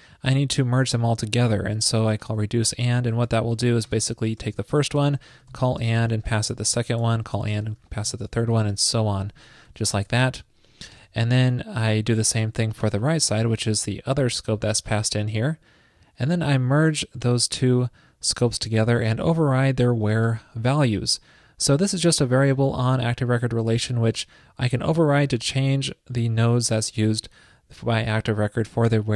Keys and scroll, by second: 8.9 alt+shift+Left, 9.2 alt+shift+Left, 9.7 alt+shift+Left.